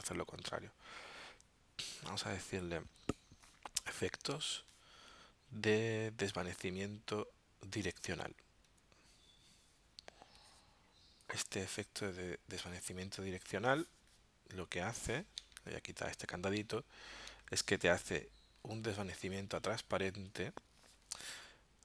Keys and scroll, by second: 15.4 alt+super+0.